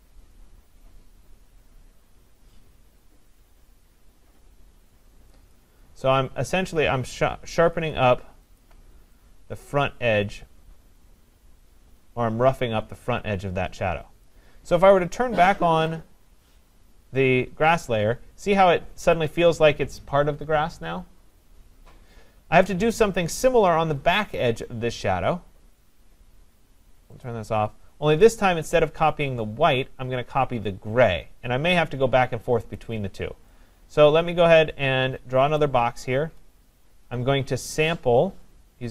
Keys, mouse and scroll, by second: 5.5 click, 6.3 [, 8.6 alt+click, 14.3 click, 15.9 click, 20.6-24.0 drag, 27.3 click, 32.8 click, 35.6 click.